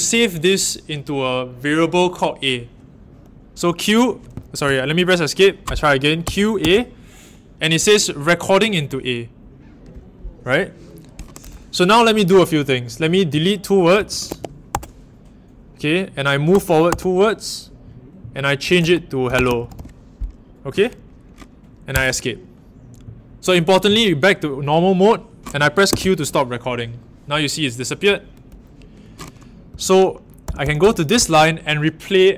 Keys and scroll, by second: 4.6 Home, 6.2-6.5 typing, 13.7-15.1 typing, 16.4-16.8 typing, 18.3-20.2 typing, 21.9 Escape, 25.9 a, 29.7-31.2 typing.